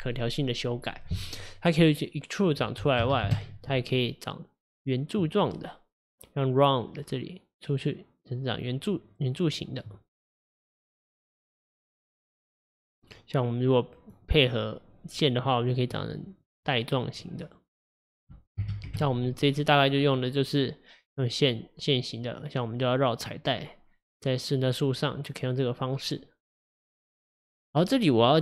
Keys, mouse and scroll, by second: 2.5-5.5 drag, 7.0-10.0 drag, 12.1-15.1 drag, 16.0-18.2 middle drag, 18.2-21.2 drag.